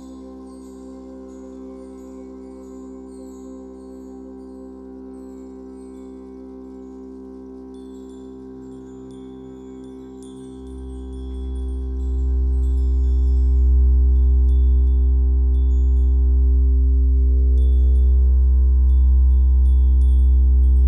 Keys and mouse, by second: 0.0 space, 0.8 space, 3.9-6.1 drag, 6.1 ctrl+s, 8.9 i, 9.8 click, 10.9 i, 12.1 click, 12.1 typing, 13.5 Left, 14.0 typing, 14.8-18.5 drag.